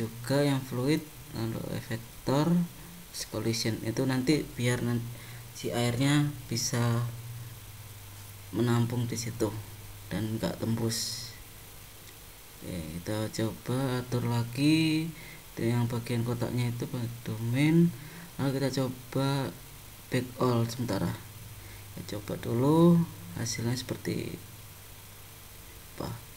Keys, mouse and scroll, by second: 0.2 click, 1.1 click, 5.4 click, 6.6 middle click, 10.9 middle click, 12.6-13.9 scroll down 3, 13.9-15.1 scroll down 8, 15.1-17.0 scroll down 6, 17.0-17.6 scroll down 5, 18.0-18.8 scroll down 4, 18.8-20.2 scroll down 5, 20.2 click, 20.2-21.2 scroll down 1.